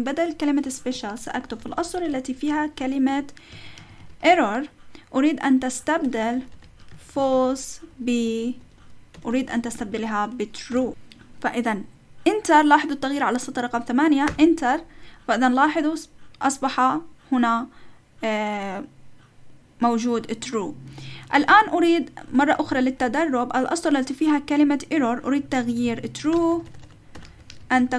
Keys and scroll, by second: 0.6 Right, 0.9-4.7 typing, 4.7 Right, 5.2 Right, 5.9 Right, 6.0-10.7 typing, 8.1 Right, 8.6 Right, 14.3 Return, 21.3 Up, 22.4-23.1 typing, 23.1 Left, 23.5 Left, 24.3 Left, 24.3 Right, 24.9 Right, 25.4 Right, 25.7 Left, 25.8 Left, 26.3-27.9 typing.